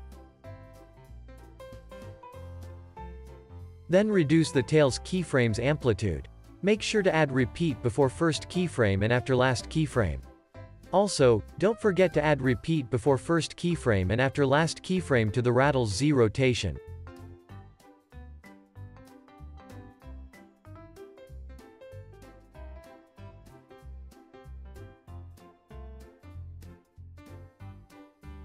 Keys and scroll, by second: 0.3 super+v, 1.3 c, 23.3 super+s.